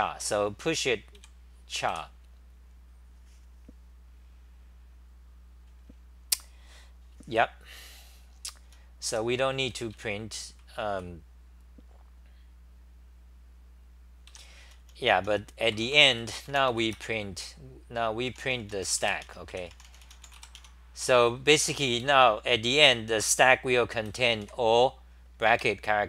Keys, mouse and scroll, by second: 0.7 t, 1.2 ,, 1.9 g, 8.8-10.9 typing, 14.3 ,, 15.5-17.0 typing, 19.3 Home, 19.5-20.2 typing, 20.6 Home, 21.6 g, 22.0 ,, 23.9-24.9 typing, 25.6 ctrl+g.